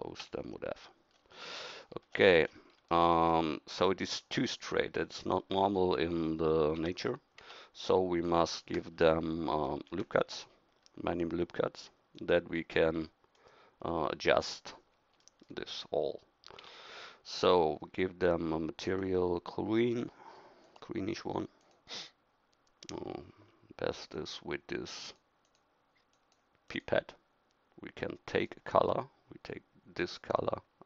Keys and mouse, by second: 0.2 f, 6.8 Tab, 7.4 Tab, 9.8 ctrl+r, 16.6 Tab.